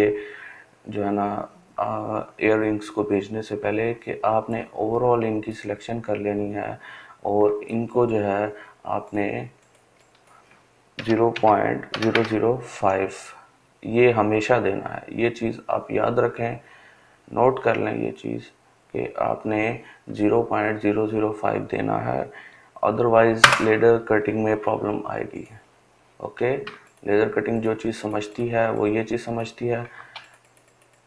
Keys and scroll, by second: 9.5-11.2 typing, 22.0 Return.